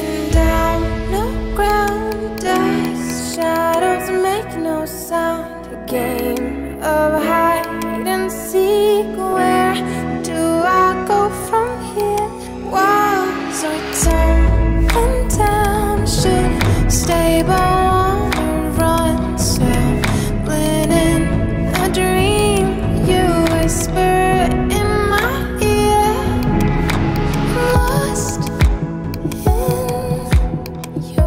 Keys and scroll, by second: 0.0 ], 11.2 [, 13.2 ], 14.8 [, 23.1 ].